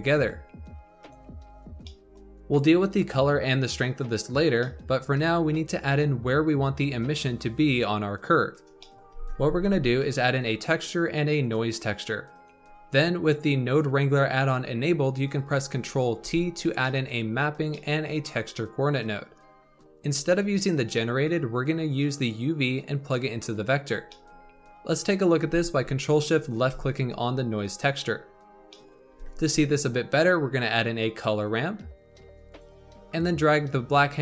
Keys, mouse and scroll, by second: 0.2-1.6 drag, 1.6 scroll down 2, 1.8-7.6 middle drag, 8.7-9.1 middle drag, 9.1 shift+a, 15.3 click, 16.1 ctrl+t, 16.7-20.0 middle drag, 20.0 scroll up 2, 20.7-21.8 scroll up 3, 21.8-23.8 drag, 23.8 scroll down 2, 24.0-26.3 middle drag, 26.3 ctrl+shift+click, 28.6-29.1 middle drag, 29.1 shift+a, 33.6-34.2 drag.